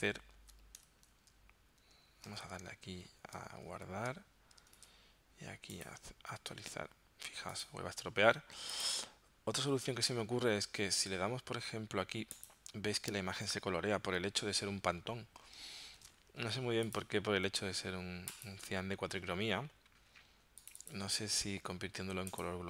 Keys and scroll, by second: 1.0 super+Tab, 2.3 super+Tab, 3.7 super+s, 4.8 super+Tab, 16.0 super+z.